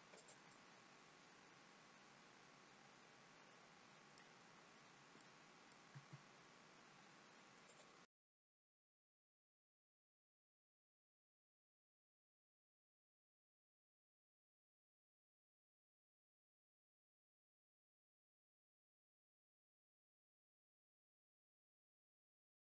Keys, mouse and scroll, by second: 0.5 middle click, 4.3-5.1 scroll down 2, 5.1 middle click, 5.9 e, 8.1 middle click, 8.2 e, 8.7 middle click, 9.0 middle click, 9.4 scroll up 2, 9.5 middle click, 9.5-9.8 scroll down 1, 9.8 g, 10.4 scroll up 1, 10.5 middle click, 11.3 ctrl+z, 11.7 ctrl+z, 11.7 middle click, 12.1 g, 12.5 middle click, 12.7 middle click, 12.8 middle click, 12.8 scroll down 1, 13.1 click, 13.3 click, 13.3 g, 13.8 middle click, 14.3 click, 14.4 middle click, 14.6 middle click, 14.8 click, 15.0 shift+click, 15.2-16.7 shift+click, 16.7 middle click, 16.9 g, 17.3 click, 17.3 middle click, 18.2 middle click, 18.2 r, 18.8 middle click, 19.6 middle click, 19.6 click, 20.0 middle click, 20.0 shift+click, 20.1 shift+click, 20.3 shift+click, 20.5 scroll up 3, 20.6 shift+click, 20.9 d, 21.2 middle click, 21.2 f, 21.4 middle click, 21.8 middle click, 21.8-22.2 scroll down 3, 21.9 middle click, 22.2 middle click, 22.5 click.